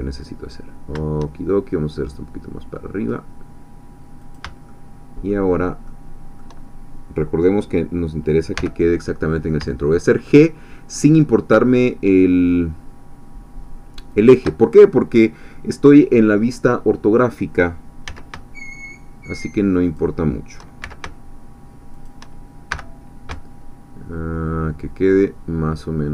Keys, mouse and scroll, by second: 4.2 shift+click, 4.7-7.0 shift+middle drag, 8.6 g, 14.1 shift+click, 18.1 s, 19.9 shift+click, 20.8 shift+s, 22.0 shift+click, 22.7 g.